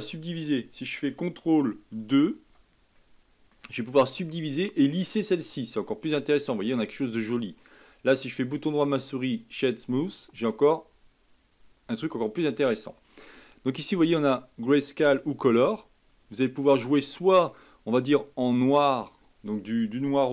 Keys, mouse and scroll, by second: 1.9 ctrl+2, 2.9 middle click, 3.8-4.1 scroll up 2, 4.2-7.4 middle drag, 7.8-10.1 right drag, 10.1-13.1 middle drag, 14.1-16.4 drag, 16.4-18.2 middle drag, 18.2-20.3 drag.